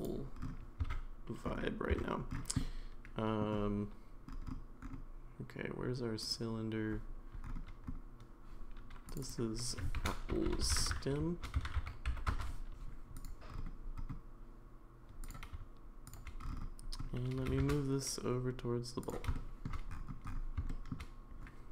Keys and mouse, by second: 0.0 click, 0.8 Tab, 1.9 Tab, 2.6 middle click, 6.2 click, 9.1 click, 9.2-12.8 drag, 10.4 p, 13.2 click, 15.2 click, 17.4 g, 19.3 middle click, 20.7 shift+middle click.